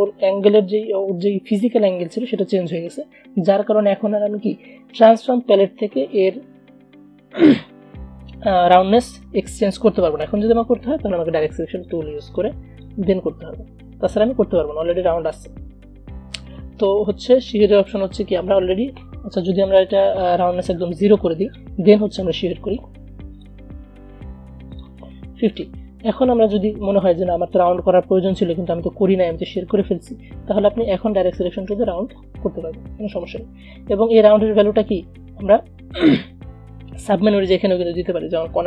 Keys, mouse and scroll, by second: 16.6 ctrl+z, 17.7 click, 21.3 click, 22.4 v, 23.4 click, 26.7 a, 31.5-33.8 drag, 33.8 ctrl+z, 38.0 click.